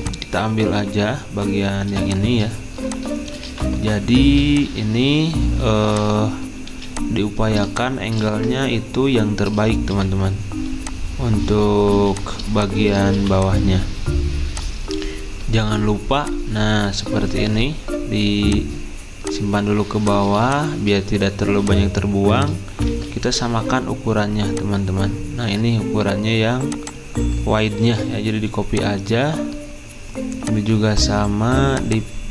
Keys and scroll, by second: 6.7 typing, 8.3 ctrl+z, 9.9 v, 11.9 z, 13.1 typing, 22.9 ctrl+z, 27.8 ctrl+c.